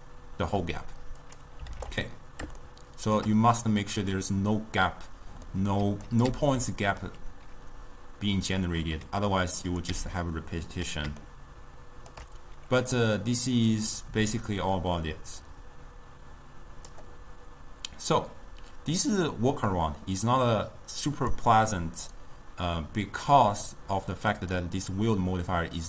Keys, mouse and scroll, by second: 2.7-6.1 shift+middle drag, 6.1 click, 6.3 m, 9.8 click, 10.0 m, 11.3-13.8 shift+middle drag, 13.8-16.8 drag, 20.3-22.1 drag, 22.1-24.5 middle drag, 24.5-25.8 drag.